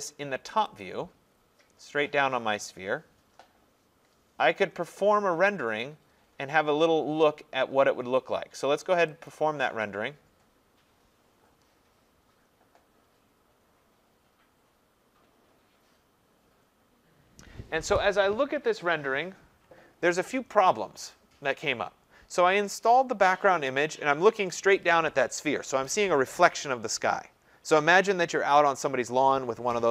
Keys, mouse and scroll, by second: 0.6 click, 0.8 click, 1.2-1.6 scroll, 1.9-3.0 scroll, 3.0-3.6 scroll, 3.6 scroll down 10, 4.0-4.7 scroll, 9.3 click.